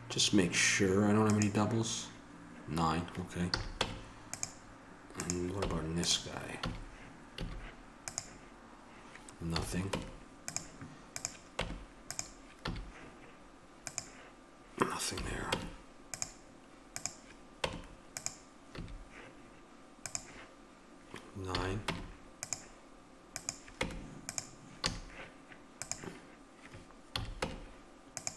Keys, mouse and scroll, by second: 1.2-3.5 drag, 3.5 a, 3.8 Tab, 5.2-6.8 right drag, 5.6 Tab, 6.6 a, 7.4 a, 9.5 a, 9.9 Tab, 11.6 Tab, 12.6 a, 15.2 a, 15.5 Tab, 17.6 Tab, 18.7 a, 21.5 a, 21.8 Tab, 23.8 Tab, 24.8 a, 27.1 a, 27.4 Tab.